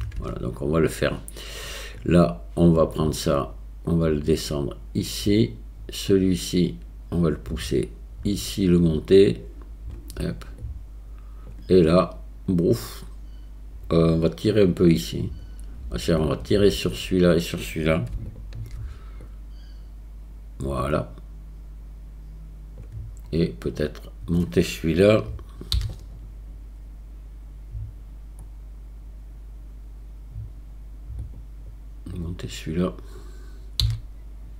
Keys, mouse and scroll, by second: 2.0 click, 3.9-5.4 drag, 6.3 click, 7.6 click, 8.9-10.0 drag, 10.7 click, 18.3 shift+click, 19.3-22.8 drag, 32.2 click.